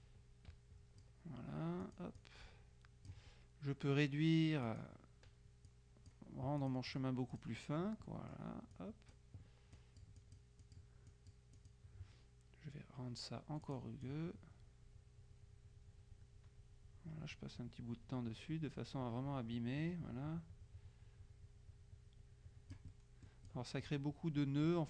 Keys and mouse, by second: 0.1-1.6 drag, 1.9 click, 4.7 click, 5.7-8.0 drag, 8.1 click, 8.9 right click, 9.9 click, 11.7 click, 13.7 click, 23.1 click, 23.6 click.